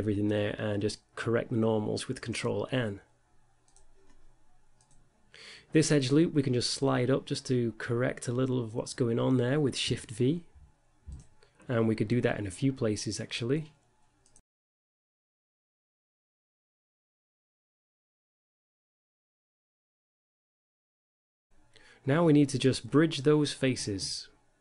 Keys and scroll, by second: 0.6 ctrl+n, 1.4 Tab, 5.1 Tab, 7.6 shift+v, 13.5 shift+v, 15.2 ctrl+r, 17.3 ctrl+r, 18.8 shift+v, 22.3 z.